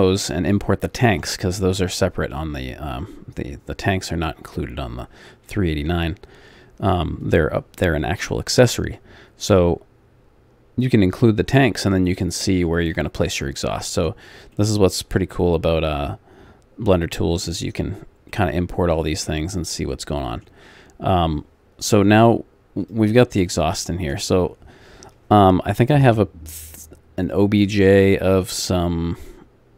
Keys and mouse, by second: 14.5 middle click, 14.7 middle click, 17.9 click, 22.8 click, 23.5-27.2 middle drag, 27.2-29.3 drag.